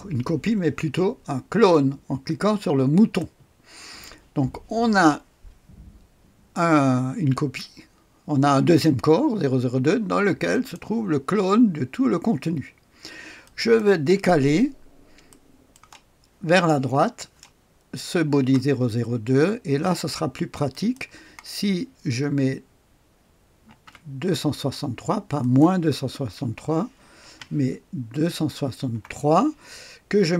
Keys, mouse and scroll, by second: 2.8 click, 10.4 click, 13.3 click, 14.4-15.2 scroll down 1, 15.2-16.3 drag, 20.6 click, 23.6 ctrl+v, 25.3 click, 27.0 Left, 28.8 BackSpace.